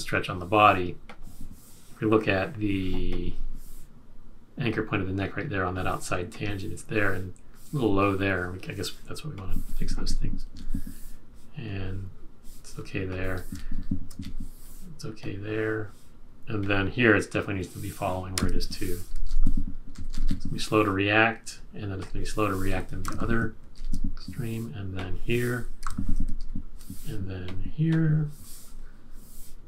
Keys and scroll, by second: 10.0 shift+Up, 10.5 shift+Up, 13.7 shift+Up, 14.1 shift+Up, 18.3 F6, 19.3 shift+Down, 19.9 Down, 20.0 Down, 20.2 Down, 23.0 F6, 23.7 shift+Up, 25.8 F6, 26.4 shift+Down.